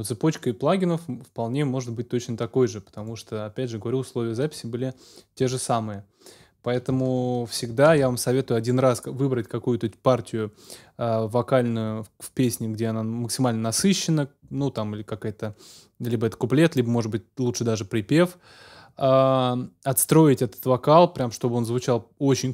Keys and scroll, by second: 7.9 super+s.